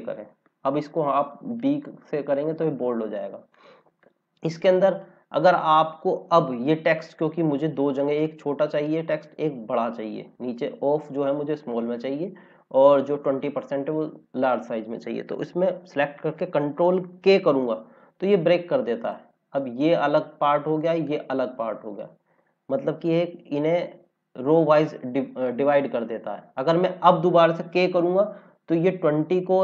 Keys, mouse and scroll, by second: 1.5 click, 3.5 click, 7.4 scroll down 1, 9.7 scroll up 1, 14.4 scroll up 1, 17.3 ctrl+k, 18.9 click, 23.0 ctrl+z, 23.6 ctrl+z, 28.5 click, 28.8 scroll up 1.